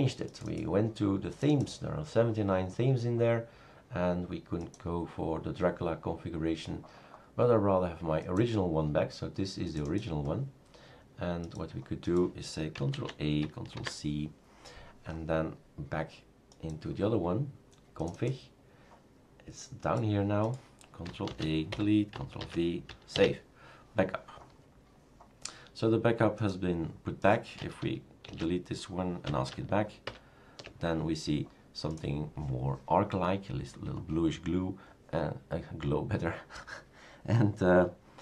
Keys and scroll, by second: 12.9 ctrl+a, 13.7 ctrl+c, 21.3 ctrl+a, 21.7 Delete, 22.4 ctrl+v, 23.1 ctrl+s, 28.4 shift+super+q, 30.1 super+Return.